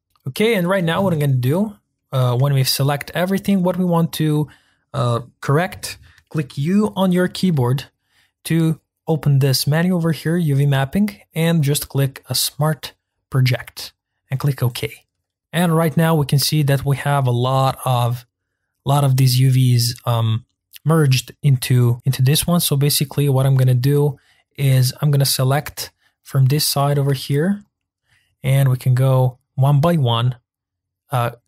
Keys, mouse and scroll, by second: 0.0-1.8 middle drag, 1.8-3.1 scroll down 2, 3.1-14.1 shift+middle drag, 15.4 ctrl+z, 22.4 click, 22.9 click, 24.5 click, 25.8-27.7 shift+middle drag, 27.7 shift+click, 28.7 g.